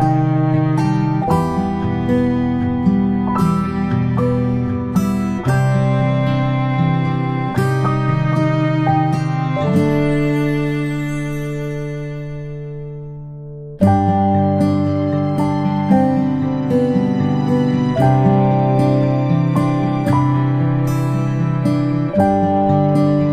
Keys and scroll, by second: 8.1 ctrl+a, 11.0 p.